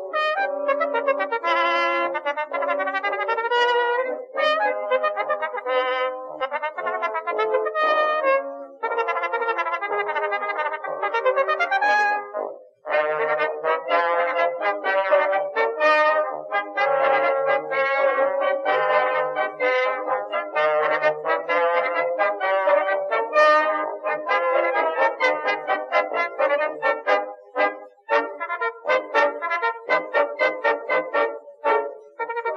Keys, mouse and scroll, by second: 2.2 click, 3.1 middle click, 3.5 s, 4.8 click, 5.8 click, 7.1 middle click, 7.9 middle click, 8.9 click, 10.5 s, 13.9 ctrl+z, 15.1 click, 18.3 shift+s, 19.0 a, 19.1 Tab, 19.8 Tab, 20.4 shift+a, 23.2 s, 24.1 click, 25.5 ctrl+r, 26.8 ctrl+r, 28.2 middle click, 28.7 KP_1, 29.0 z, 29.3 a, 29.5 c, 31.0 click, 32.0 Tab.